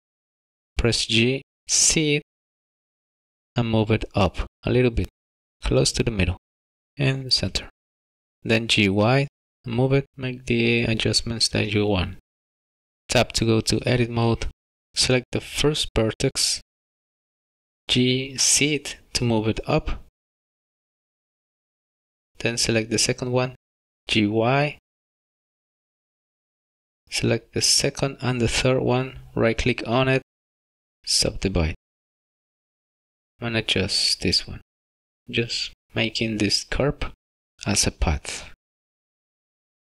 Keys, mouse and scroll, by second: 1.1 g, 2.0 z, 8.2 g, 8.8 y, 11.1 g, 13.1 Tab, 13.8-14.7 scroll up 5, 14.9 shift+middle click, 16.2 click, 17.8 z, 20.1 g, 24.0 click, 24.2 g, 25.3 y, 26.5 g, 27.4 click, 30.3 right click, 33.7 click, 34.8 g, 38.6 click, 38.7 g, 39.1 Tab, 39.3 middle click, 39.5 scroll down 3, 39.5 shift+middle click.